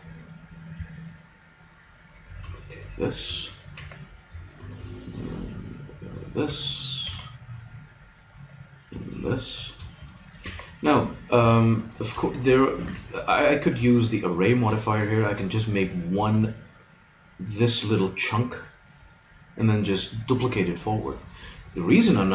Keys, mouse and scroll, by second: 3.7 ctrl+r, 6.3 click, 7.1 ctrl+r, 8.1 click, 10.4 ctrl+r, 11.9-13.7 drag, 12.8 ctrl+r, 14.3 click.